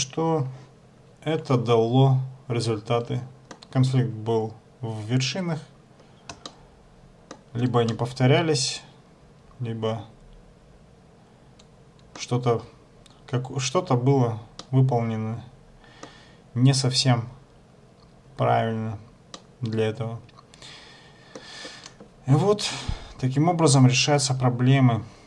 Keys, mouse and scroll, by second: 4.9-5.8 scroll up 5, 5.8-6.4 scroll down 4, 6.6 shift+middle click, 8.0 middle click, 14.8 middle click, 19.5 middle click.